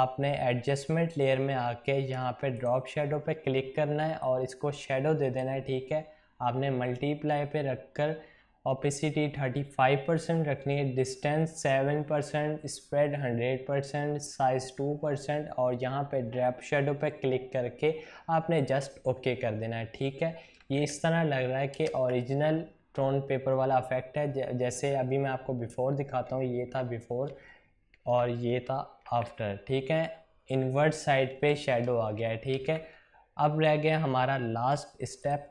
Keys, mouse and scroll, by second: 2.5-7.9 drag, 18.6 click, 26.3 ctrl+z, 29.0 ctrl+shift+z, 35.2 click.